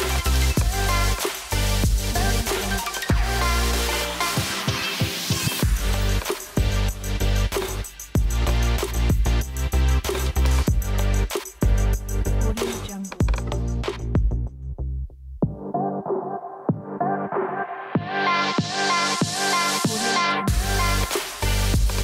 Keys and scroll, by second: 14.7-21.1 typing.